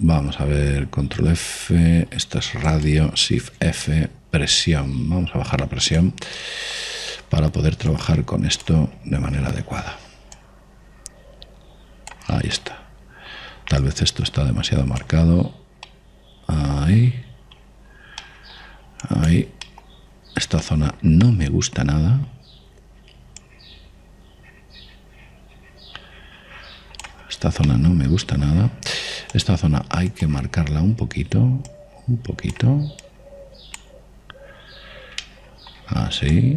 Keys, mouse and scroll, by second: 2.1 ctrl+f, 4.5 shift+f, 7.1 click, 7.4-9.1 middle drag, 9.1 click, 10.8 ctrl+z, 11.5 click, 13.2 click, 13.7-15.6 middle drag, 15.0-16.6 drag, 17.0-24.6 middle drag, 20.2 click, 24.6-26.5 drag, 28.4-30.5 middle drag, 30.5 click, 32.9-36.0 drag, 35.8 middle click, 35.9-36.5 middle drag.